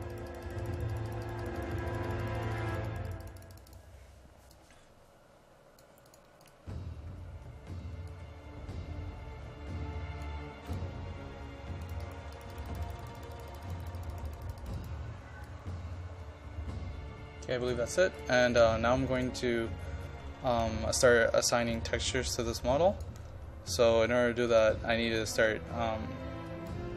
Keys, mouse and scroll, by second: 16.2-18.2 drag, 19.6-20.5 scroll up 1, 20.5 click.